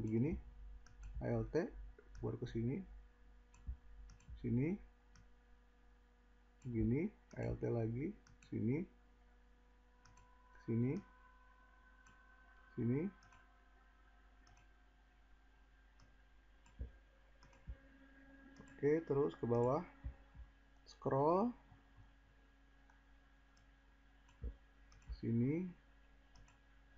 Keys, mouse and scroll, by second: 19.3-20.8 scroll.